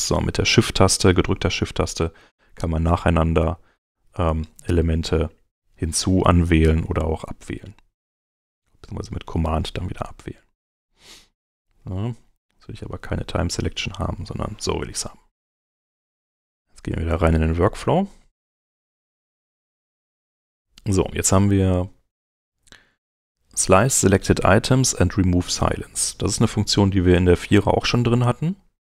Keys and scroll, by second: 4.1 shift+Home, 4.8 Home, 11.5 super+Home.